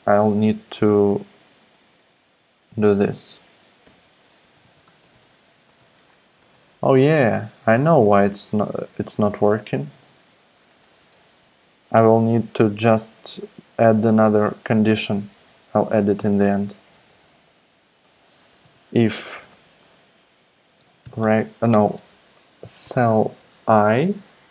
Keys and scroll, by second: 3.8 Return, 3.9 Return, 4.1-6.4 typing, 6.5 Left, 8.3 shift+(, 8.3 shift+), 9.3 shift+super+Left, 9.9 super+x, 10.8 super+BackSpace, 12.7 super+BackSpace, 12.9 Return, 13.3 Return, 13.6 Up, 13.9 Return, 14.4 Down, 14.8-15.4 typing, 16.5 Down, 16.7 Down, 16.8 Down, 16.9 Down, 17.1 Down, 17.2 Down, 17.4 Down, 18.1 Up, 18.3-24.5 typing, 21.9 alt+BackSpace.